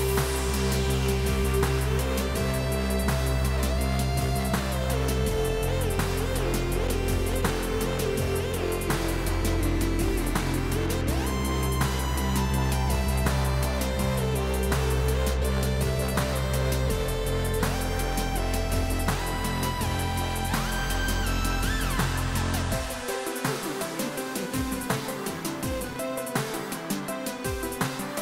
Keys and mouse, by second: 5.9 right click, 6.2 click, 6.7 click, 8.1 a, 8.3 click, 10.9 KP_3, 11.1 Return.